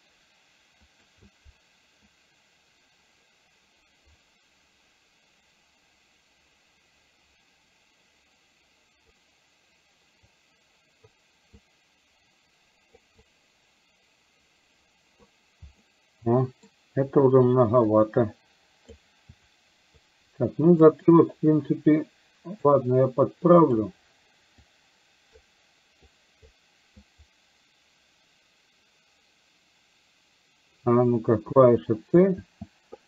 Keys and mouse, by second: 1.0 click, 2.2-9.2 drag, 10.4 click, 11.5-12.9 drag, 13.3-15.3 drag, 15.9 middle click, 17.9-19.0 drag, 19.5-20.9 shift+drag, 21.2-22.8 drag, 23.8 click, 24.7 click, 26.2 click, 27.2 click, 31.7 c, 32.4 c.